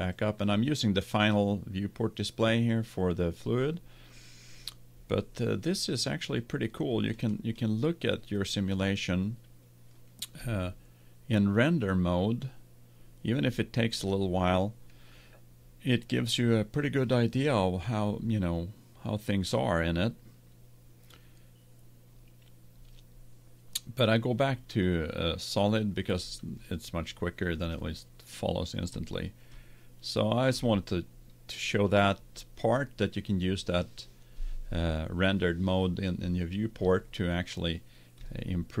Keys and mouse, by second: 7.3-9.3 middle drag, 11.5 click, 11.9 middle click, 24.9 click, 27.1-31.5 middle drag, 38.3-38.8 middle drag.